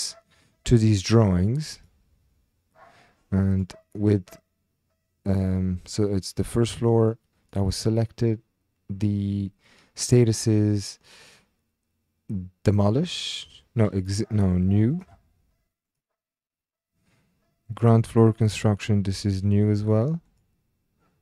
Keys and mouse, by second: 1.7 click, 3.5 click, 3.9 click, 6.9 click, 15.0-16.1 drag, 16.4 typing, 17.6-18.3 typing, 17.7 click, 19.3 click, 20.2-21.2 typing, 20.3 click.